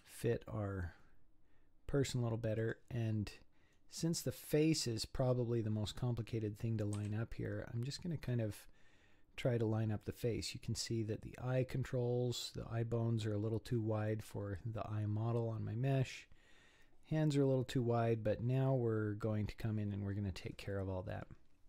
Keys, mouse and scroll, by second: 3.3-4.5 scroll up 13, 5.2-5.9 scroll down 1, 5.9-6.9 scroll up 1, 6.9 s, 12.8 scroll down 3, 14.3 scroll down 3, 15.2 scroll down 4, 17.5 scroll down 4, 18.4-19.0 scroll up 4, 19.0-19.6 scroll down 4, 19.6-20.8 scroll up 6, 20.8-21.6 scroll down 2.